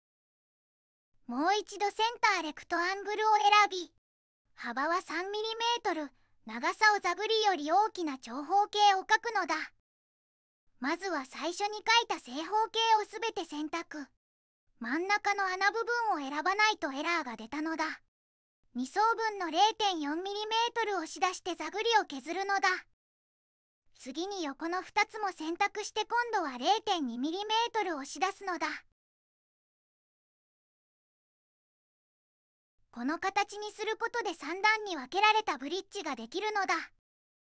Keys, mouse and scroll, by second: 0.2 right click, 2.6 click, 5.7 Tab, 6.6 3, 6.8 Tab, 8.9 click, 9.4 right click, 10.1 click, 11.5 middle click, 14.1 shift+click, 15.1 shift+click, 16.0 shift+click, 16.7 shift+click, 17.8 click, 20.1-21.2 typing, 21.6 Return, 23.0 click, 24.3 click, 25.7 shift+click, 26.9 click, 28.9-30.0 typing, 30.4 Return, 32.3 click, 35.4 click.